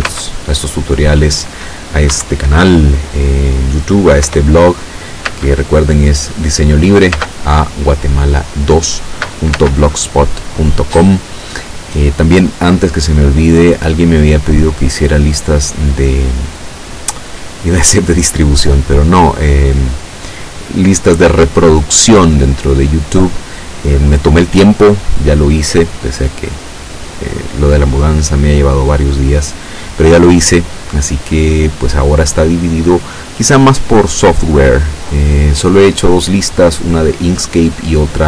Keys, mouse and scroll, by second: 0.2 space, 2.3 Escape, 2.9-3.3 scroll up 2, 3.3 scroll down 2, 4.3 p, 5.3 space, 7.2 space, 9.6 space.